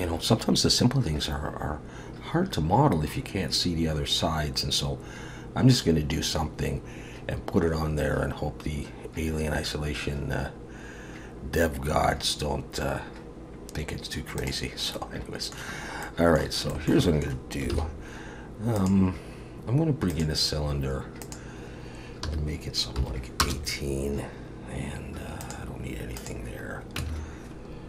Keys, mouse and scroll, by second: 14.9 middle click, 15.8-16.7 scroll up 2, 16.0 middle click, 16.7 shift+middle click, 17.0 middle click, 17.7 shift+a, 21.2 click, 25.4 click, 27.0 Tab.